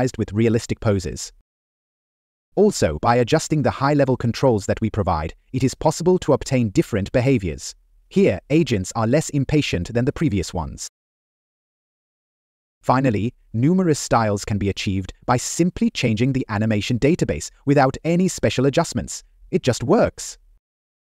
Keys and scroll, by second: 12.9 Up, 17.1 Left, 18.1 Up.